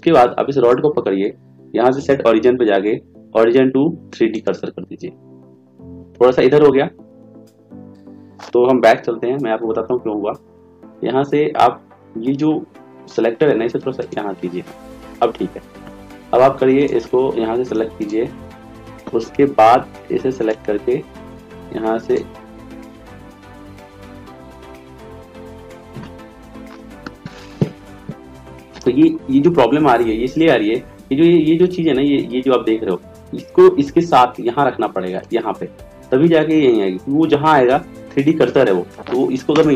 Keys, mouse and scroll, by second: 0.7-4.5 right drag, 9.1 ctrl+z, 9.5 ctrl+z, 20.5-22.2 right drag, 24.6 ctrl+z, 25.1 ctrl+z.